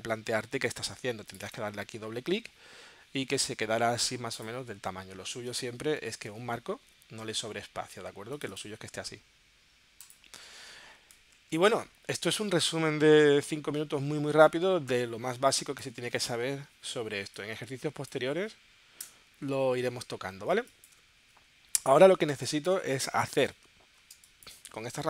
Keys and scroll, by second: 6.7 super+z, 15.4 space, 19.3 BackSpace, 20.5 space, 22.4 space, 23.1 space, 24.1 space.